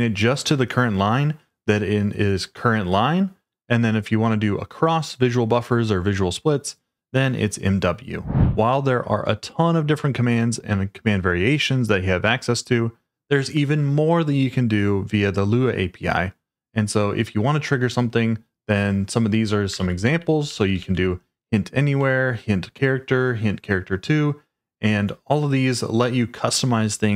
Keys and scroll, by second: 19.5-21.3 typing, 22.0 Escape.